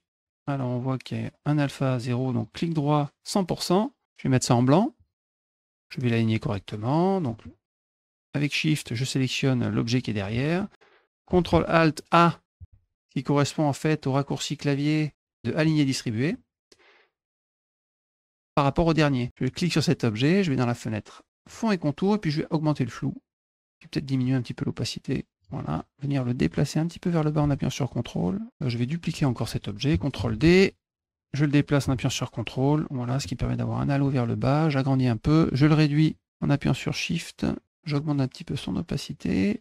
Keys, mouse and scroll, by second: 2.4 right click, 3.2 click, 4.5 click, 5.5 click, 7.6 shift+click, 15.6 click, 17.8 click, 19.0 click, 21.2 click, 22.5-23.6 drag, 24.0-25.2 drag, 26.4-28.5 drag, 28.9 click, 30.0 ctrl+d, 30.5-32.9 drag, 33.7-34.7 shift+drag, 35.8-37.4 ctrl+drag, 38.0 click.